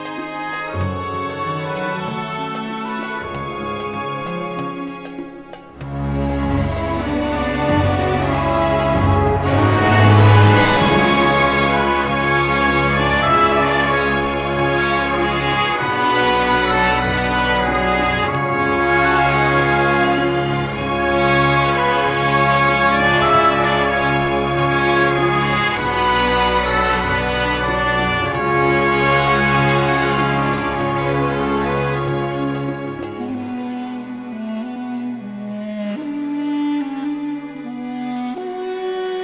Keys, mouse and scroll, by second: 0.6-2.5 typing, 3.9 click, 6.0 scroll down 1, 6.4 scroll up 1, 7.7 click, 8.1 click, 8.7 scroll down 2, 9.1 click, 10.1 0, 10.9-11.6 scroll up 4, 11.9 click, 13.6 click, 15.8 click, 16.8-17.1 scroll down 2, 18.5 click, 19.9 scroll up 1, 20.5-20.8 scroll down 1, 21.1-21.5 scroll up 2, 21.8 scroll down 2, 22.4 scroll up 2, 24.6 click, 26.5 click, 28.3 click, 29.4 m, 31.4 scroll up 2, 32.6-32.9 scroll down 2, 36.9 click, 38.8-39.2 scroll down 2.